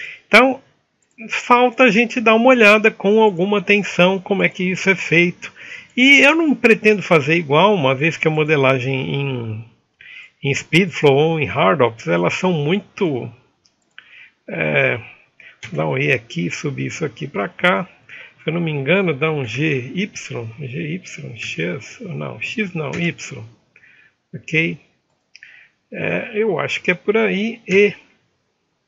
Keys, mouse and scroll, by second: 1.2 alt+w, 1.9 middle click, 3.6 ctrl+z, 3.6 n, 4.7 ctrl+Tab, 4.7-6.2 drag, 6.2 e.